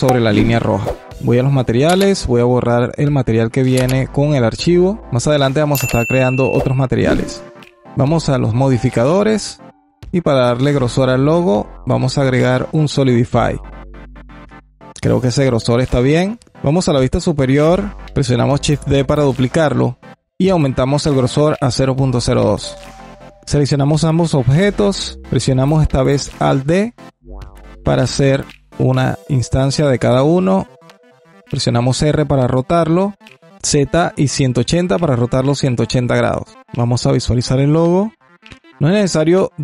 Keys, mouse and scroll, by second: 2.3-4.8 drag, 5.7-6.4 scroll up 1, 6.4-6.9 alt+middle drag, 6.9-7.2 scroll up 1, 7.2-7.8 alt+drag, 8.6-11.2 drag, 13.4-15.9 alt+drag, 16.5 KP_7, 17.5 shift+d, 20.2-22.4 drag, 23.2 click, 23.4-25.2 scroll up 2, 25.2 shift+click, 27.3 alt+d, 36.5 click, 36.9-38.0 alt+drag, 38.0 scroll down 3, 38.5-39.6 alt+drag.